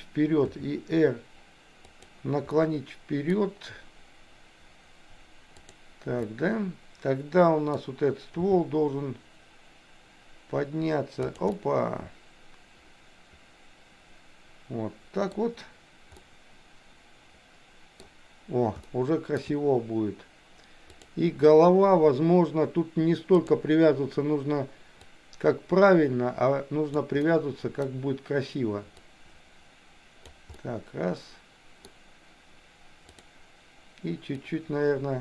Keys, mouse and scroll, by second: 0.5 r, 2.6 middle click, 6.3-7.8 middle drag, 8.5 g, 11.6 scroll up 1, 11.7-15.3 middle drag, 16.2 scroll up 1, 16.4-18.1 middle drag, 18.9 shift+middle click, 21.0 click, 23.3 click, 25.1 click, 25.3-27.0 drag, 27.2 middle click, 29.1-30.3 drag, 30.6-31.8 middle drag, 33.2 click, 34.7-35.2 drag.